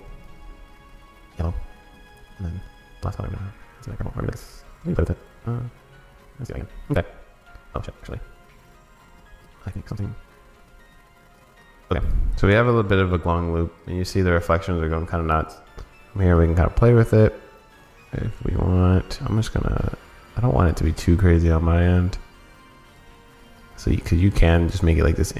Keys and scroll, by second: 13.0 super+s.